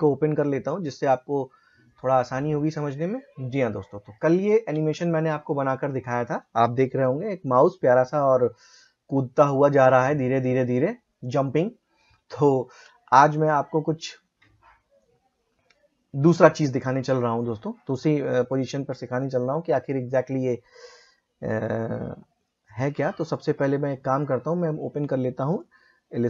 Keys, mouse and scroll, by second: 1.8 click, 1.8 typing, 4.7 space, 12.6 space, 15.0-22.1 drag, 22.1 typing, 23.2 click, 23.2 typing, 25.5 click.